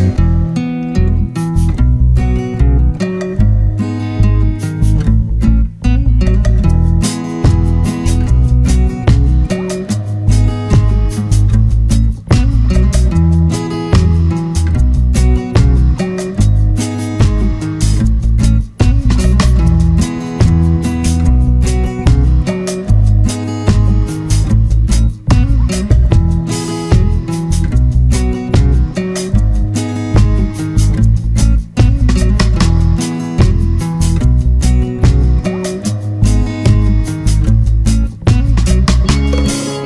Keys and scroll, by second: 35.7 ctrl+=.